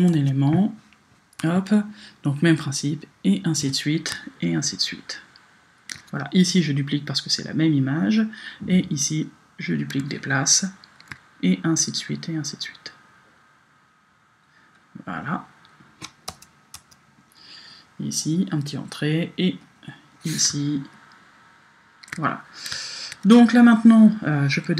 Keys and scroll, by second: 16.3 Return.